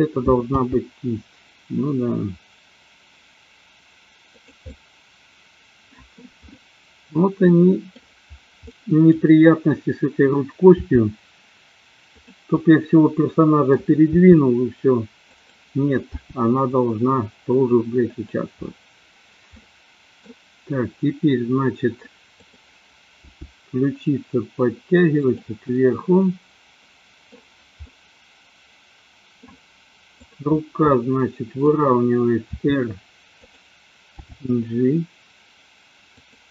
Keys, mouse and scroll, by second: 0.5 g, 4.3 click, 4.7-6.2 middle drag, 7.4-7.9 middle drag, 7.4 scroll up 1, 8.7-9.0 middle drag, 10.8 r, 12.2 click, 12.5-13.8 middle drag, 14.2 r, 15.3 click, 16.2 g, 18.2 drag, 19.5-20.3 middle drag, 22.3 click, 23.2 g, 25.8-27.3 middle drag, 27.8 scroll up 1, 27.9-29.5 middle drag, 30.2 click, 30.9 middle click, 32.4 r, 33.4 click, 34.2 g, 36.2 click.